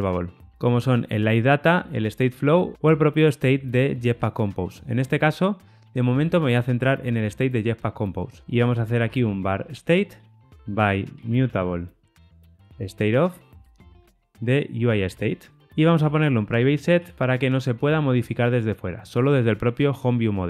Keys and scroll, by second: 13.6 Return, 15.0 Tab, 15.6 super+z, 18.5 Return.